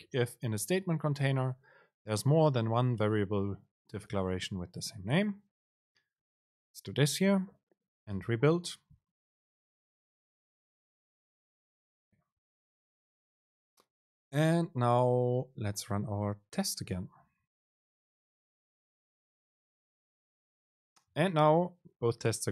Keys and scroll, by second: 8.3 ctrl+shift+super+F9, 19.7 super+r.